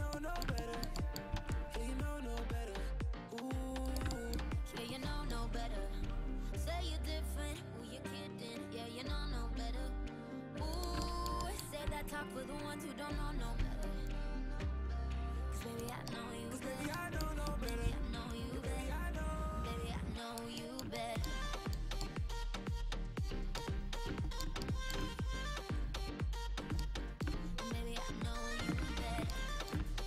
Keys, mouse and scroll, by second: 1.3 c, 5.0-9.3 middle drag, 6.1 c, 11.5 middle click, 12.0 c, 13.2 middle click, 13.7 c, 17.9 c, 21.1 middle click, 21.6 middle click, 22.2-23.3 middle drag, 23.4 middle click, 23.9-25.8 middle drag, 25.8-26.9 right drag, 29.0 ctrl+z.